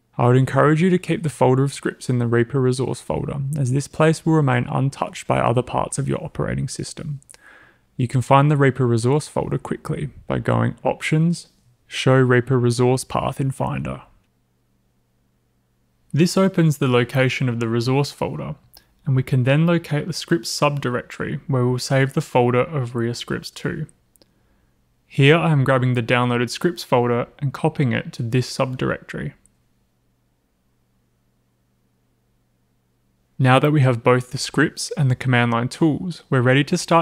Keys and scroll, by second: 4.6 super+c, 7.1 super+c, 8.8-10.0 typing, 12.9 typing, 24.0 alt+super+v.